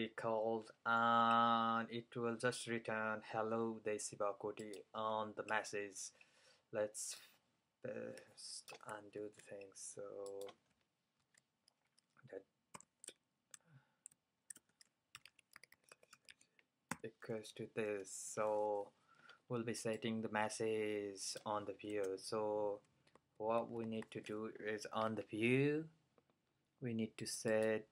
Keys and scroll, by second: 9.2 super+c, 11.3 super+v, 14.6 shift+super+BackSpace, 15.0-17.0 typing, 18.1-18.8 typing, 22.0 BackSpace, 23.0 super+BackSpace, 23.2-24.5 typing, 26.1-26.8 typing.